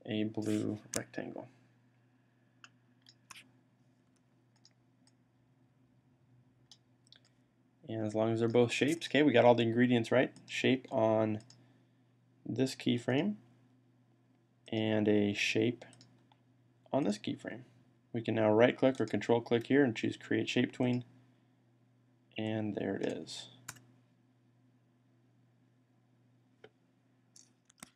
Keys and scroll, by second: 3.9 v.